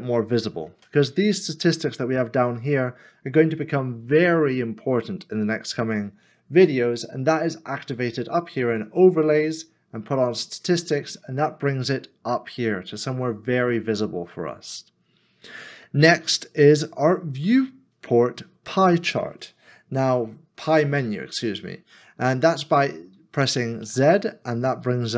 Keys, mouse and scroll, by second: 0.4 scroll up 1, 0.5 middle click, 24.8 z.